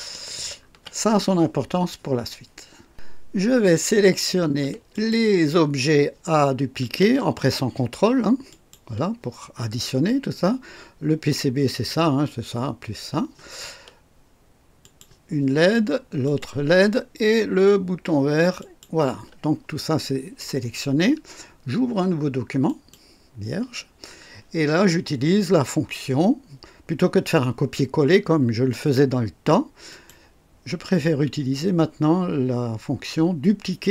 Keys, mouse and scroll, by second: 0.0-0.8 alt+scroll down 4, 4.9 ctrl+click, 8.5 ctrl+click, 11.7 ctrl+click, 14.8 ctrl+click, 16.2 ctrl+click, 18.6 ctrl+click, 22.6 click, 29.9 click.